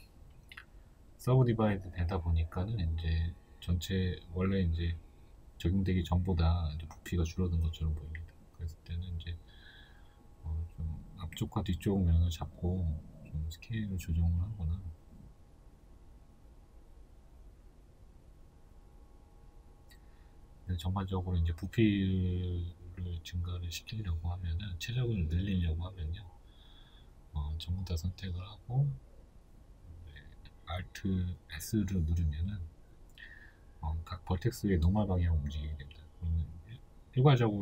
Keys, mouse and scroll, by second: 0.5 x, 1.0-1.6 scroll down 2, 2.0-2.4 scroll up 2, 3.2 Tab, 4.9 Tab, 6.3 right click, 6.8 shift+right click, 7.7 shift+right click, 8.3 shift+middle click, 8.6 shift+right click, 9.0 middle click, 9.8 shift+right click, 10.2 shift+right click, 10.9 ctrl+z, 11.5-15.4 middle drag, 15.0 z, 15.4 shift+right click, 15.8 shift+right click, 16.2 shift+right click, 16.6-20.1 middle drag, 17.6 s, 20.1 click, 20.3-26.9 middle drag, 26.9 shift+right click, 27.3-30.1 middle drag, 27.8 a, 31.1 alt+s, 35.1 middle click, 35.5 KP_1, 36.7 shift+middle click.